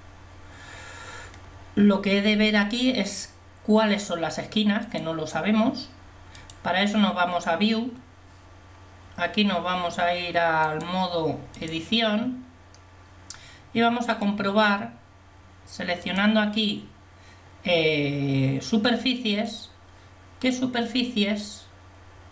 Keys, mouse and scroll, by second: 11.8 click, 14.2 right click.